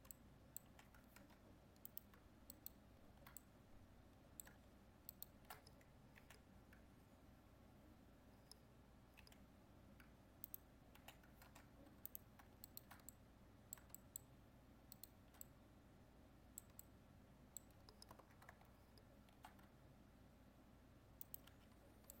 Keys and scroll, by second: 1.2 ctrl+Tab, 11.5 ctrl+Tab.